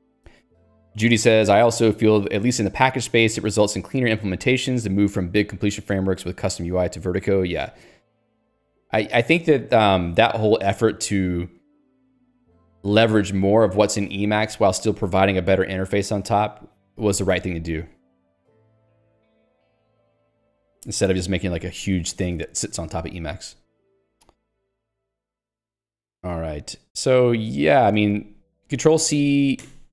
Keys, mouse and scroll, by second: 18.8 Escape, 19.5 Escape, 20.0 ctrl+g, 20.4 Escape, 20.7 j, 26.4 ctrl+d.